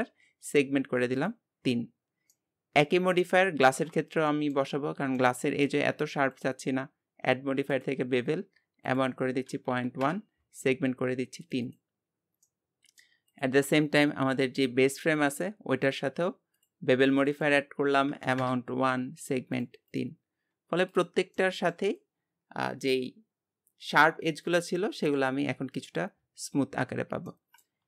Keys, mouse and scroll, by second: 1.9 scroll down 2, 2.3 middle click, 3.2 click, 3.6-4.3 scroll up 1, 4.3 shift+middle click, 4.7-5.2 scroll up 2, 5.2-6.4 shift+middle drag, 7.9-12.2 drag, 12.2-12.5 scroll down 3, 12.5 middle click, 13.3 click, 13.8-14.3 scroll up 1, 14.3-15.3 scroll up 1, 15.3 click, 16.7-20.5 drag, 20.5 scroll down 2, 20.9 click, 21.3-24.5 middle drag, 27.2 scroll down 1, 27.3 middle click.